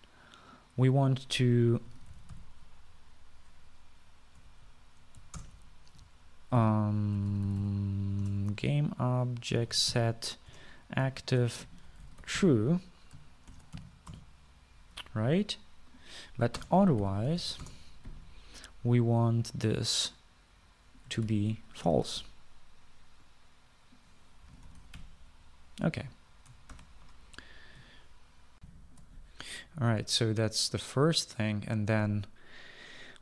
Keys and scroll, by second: 2.8-4.0 typing, 5.6 Down, 5.8 Down, 6.4 Up, 6.5 Return, 7.5-9.2 typing, 9.4 Return, 10.5-14.9 typing, 11.7 Return, 15.3 Return, 17.7-19.2 typing, 22.4 ctrl+c, 23.0 ctrl+v, 25.4-26.6 typing, 27.9 ctrl+s, 29.9 shift+F9, 29.9 shift+F9.